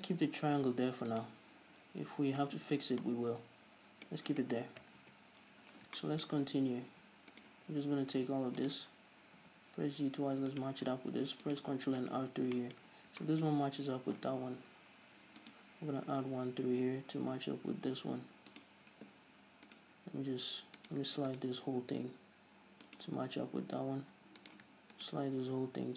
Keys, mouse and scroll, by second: 0.1-0.6 scroll down 1, 0.6-1.4 scroll up 1, 1.4 right click, 1.7 scroll down 1, 2.0 a, 2.7 Tab, 3.0-3.3 scroll down 1, 3.3-7.6 middle drag, 5.1 KP_3, 5.3 Tab, 5.8 scroll up 1, 6.7-7.6 scroll up 2, 7.6 alt+right click, 8.0 middle click, 8.0-8.9 scroll down 2, 8.9 shift+right click, 9.7 g, 10.9 click, 11.4 ctrl+r, 12.4 right click, 12.8-18.9 shift+middle drag, 14.8 ctrl+r, 18.9 click, 20.0-21.3 right drag, 22.1 g, 23.3 click, 24.7 right click, 25.3 ctrl+right click, 25.7 g.